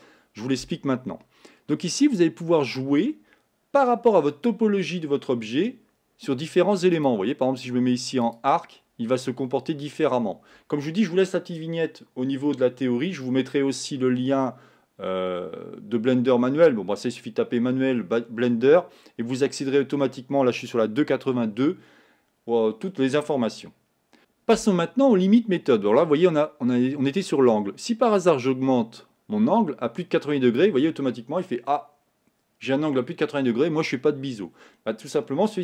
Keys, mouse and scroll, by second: 28.8-35.6 drag.